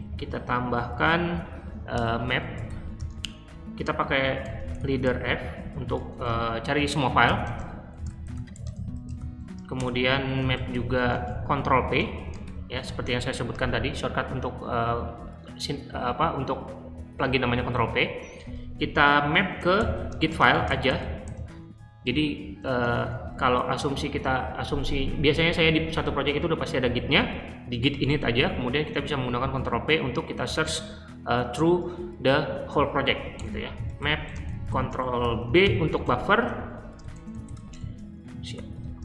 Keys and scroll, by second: 0.0-13.3 typing, 1.9 Tab, 18.4 space, 19.5-23.5 typing, 33.3 Return, 33.4-39.0 typing.